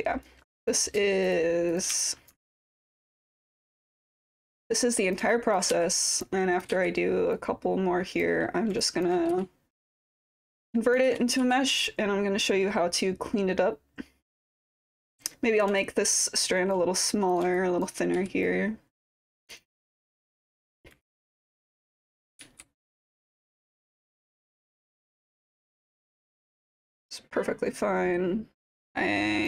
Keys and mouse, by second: 2.0 alt+click, 2.5 ctrl+d, 2.5-3.9 typing, 4.2 click, 4.4 click, 5.3 alt+click, 6.3 click, 7.4 click, 8.8 alt+click, 10.2 click, 11.1 ctrl+z, 11.9-15.7 drag, 15.8 alt+click, 17.3 click, 17.6 alt+click, 18.2 w, 18.5 click, 19.5 click, 19.9 click, 21.0 click, 23.1 click, 23.3 middle click, 24.0-25.1 alt+drag, 27.0-28.0 alt+drag, 28.3-29.4 alt+drag.